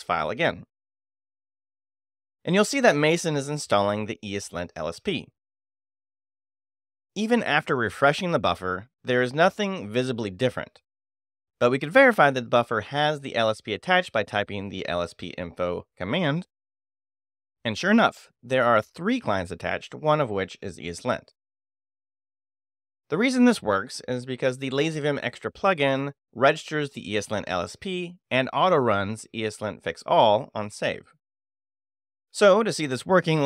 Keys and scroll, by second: 8.8 shift+;, 9.3 shift+e, 9.9 e, 10.3 Return, 14.0 shift+;, 14.3 shift+l, 14.8 shift+s, 15.0 p, 15.4 Tab, 16.9 Return, 19.0 ctrl+d, 24.4 ctrl+q.